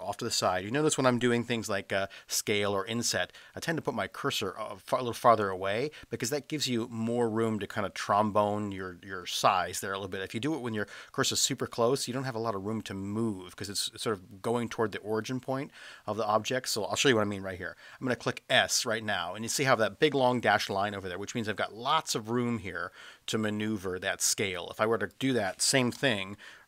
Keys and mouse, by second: 18.6 s, 25.1 click, 26.0 ctrl+z.